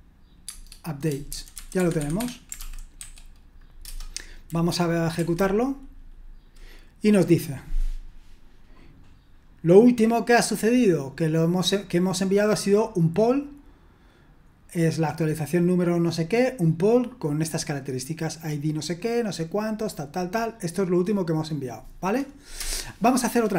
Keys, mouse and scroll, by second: 0.4 Tab, 1.2-4.3 typing, 5.1 F5, 21.3-22.5 drag, 22.5 Return.